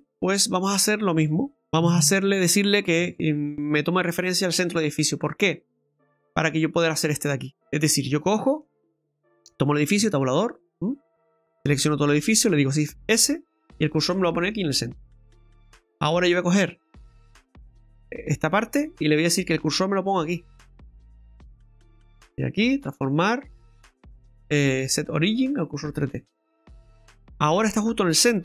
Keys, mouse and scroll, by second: 0.0 right click, 5.2 middle click, 8.9 middle click, 9.0 right click, 10.0 Tab, 11.6 a, 12.7 shift+s, 13.8 typing, 14.0 middle click, 15.9 middle click, 17.0 Tab, 18.1 right click, 19.2 middle click, 21.7 click, 26.2 middle click.